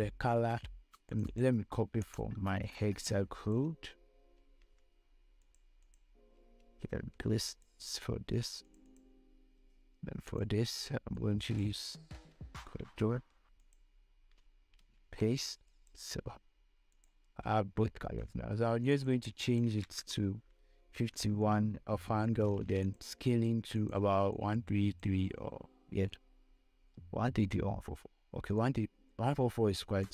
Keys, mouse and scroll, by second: 4.8 ctrl+c, 5.7 click, 6.9 ctrl+v, 7.8 click, 12.7 ctrl+c, 13.9 click, 14.1 click, 15.2 ctrl+v, 16.0-22.5 drag, 23.1-27.8 drag.